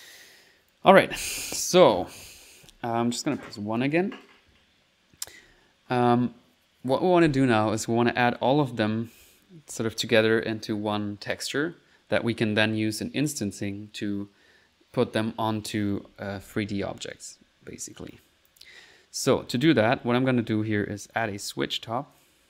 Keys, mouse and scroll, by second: 0.7 click, 2.4 click, 2.7 1, 2.9 click, 3.5 click, 4.2 middle click, 5.5 ctrl+s, 8.2 middle click, 20.0 typing, 21.0 click, 21.4 typing, 22.2 click.